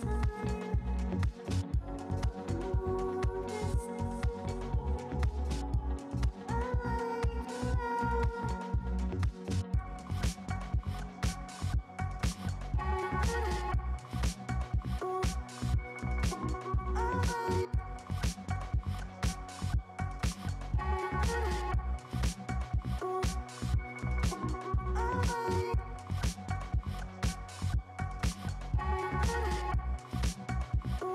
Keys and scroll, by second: 7.1 ], 13.0 space, 13.2 space, 14.2 ], 25.2 ctrl+alt+z, 25.5 [, 25.8 ctrl+alt+z.